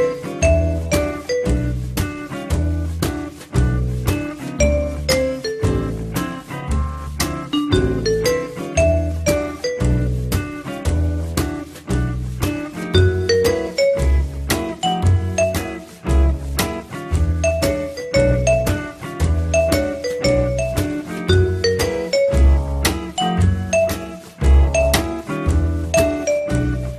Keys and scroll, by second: 6.4 l, 12.2 f, 26.8 1.